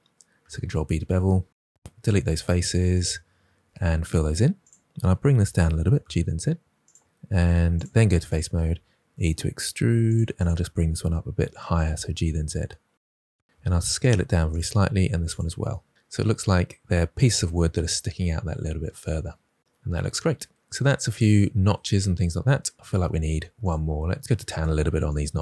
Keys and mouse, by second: 1.2 click, 1.6 Delete, 2.7 2, 2.8 click, 3.6 f, 3.7 f, 4.5 click, 5.3 g, 5.9 z, 6.7 click, 7.5 3, 7.7 click, 8.2 click, 9.0 e, 10.0 click, 11.8 g, 12.1 z, 13.4 s, 13.9 click, 14.4 click, 14.8 s, 15.2 click, 15.6 middle click, 24.3 2, 24.3 z, 25.2 ctrl+b.